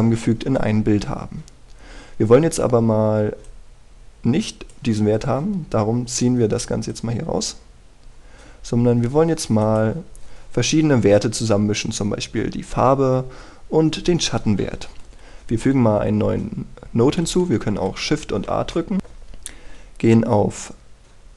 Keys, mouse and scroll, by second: 4.4-5.8 drag, 19.0 shift+a.